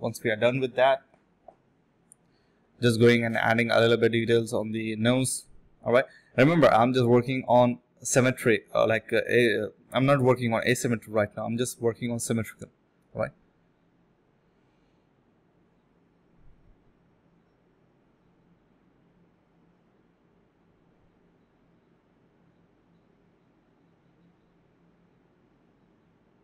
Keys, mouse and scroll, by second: 0.8 double click, 2.4 alt+click, 4.5 shift+click, 6.5 alt+click, 7.0 shift+click, 7.6 shift+space, 8.2 shift+click, 9.7 alt+click, 9.9 alt+click, 11.8 double click, 13.2 ctrl+b, 13.5 space, 14.2 space, 16.3 alt+click, 16.6 alt+click, 16.8 alt+click, 17.0 ctrl+z, 17.7 ctrl+z, 19.5 double click, 20.9 double click, 21.7 1, 22.4 double click, 23.4 shift+click, 23.5 shift+double click, 23.6 shift+click, 24.0 double click, 24.2 shift+click, 24.3 shift+double click, 24.4 shift+click, 25.0 typing, 25.5 double click.